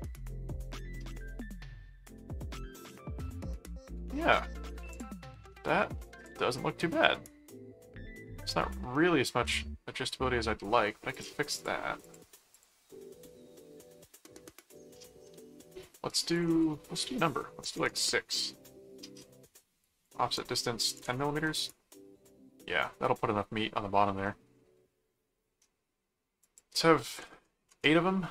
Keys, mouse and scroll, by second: 1.5-3.9 middle drag, 4.9 click, 5.8-8.9 middle drag, 9.4 middle click, 11.1-13.1 drag, 16.3 click, 19.8 click, 22.8 middle click, 24.2 middle click, 26.4 click.